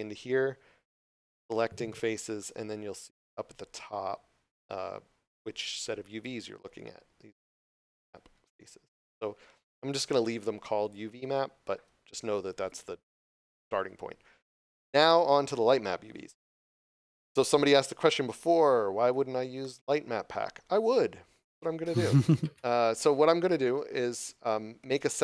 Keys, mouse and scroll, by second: 3.8 scroll down 1, 7.9 scroll up 1, 10.8 click, 19.6 middle click.